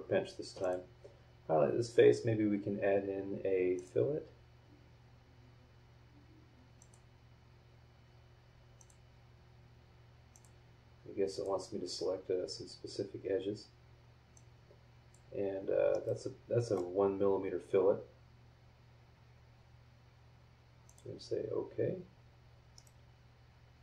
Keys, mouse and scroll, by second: 0.6 click, 3.7 click, 6.8 click, 8.8 click, 10.3 click, 11.3 click, 14.3 click, 15.9-16.9 middle drag, 16.0 click, 16.0 right click, 17.9 scroll up 1, 20.8 click, 21.6 scroll down 1, 22.3 scroll up 1, 22.7 middle click, 22.8-23.8 right drag.